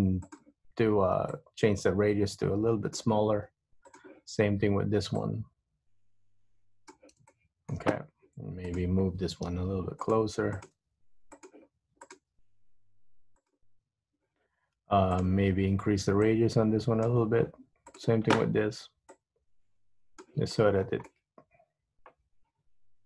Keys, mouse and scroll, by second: 0.4 click, 1.5 click, 4.0 click, 5.3 click, 7.4 shift+middle click, 8.8 click, 9.7 g, 10.7 click, 10.8 g, 12.1 click, 12.3 g, 15.2 click, 16.4 click, 18.0 click, 19.3 click, 20.7 scroll up 2, 20.8-22.0 scroll down 5, 22.0 middle click.